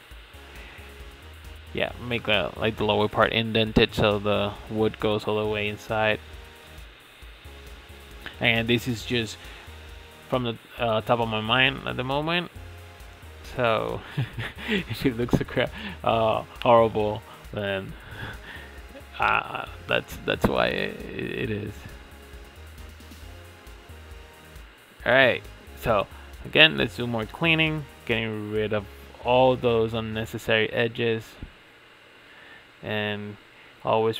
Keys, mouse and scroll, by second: 0.6 shift+middle click, 0.9-1.2 scroll up 1, 1.2-1.7 middle drag, 1.7 click, 3.1 x, 5.0 2, 5.5 alt+click, 6.9 e, 8.9 g, 10.7 s, 11.1 g, 13.6-14.0 scroll down 1, 14.0-14.8 middle drag, 14.8 Tab, 15.4 Tab, 16.1 f, 16.8 f, 17.5 Tab, 17.9-18.8 middle drag, 18.8 click, 19.2-19.5 scroll down 5, 19.5-19.9 middle drag, 19.9-20.5 scroll down 1, 20.5 KP_1, 20.8 click, 21.6 click, 22.1-24.4 shift+middle drag, 24.4 Tab, 24.7 shift+middle click, 25.0-25.3 scroll up 4, 25.3 shift+middle click, 26.3 x, 29.2 alt+click, 29.7 alt+shift+click, 30.3 alt+shift+click, 31.3 alt+shift+click, 31.9 alt+shift+click, 32.4 alt+shift+click, 32.9 alt+shift+click, 33.4 alt+shift+click, 34.0 shift+middle click.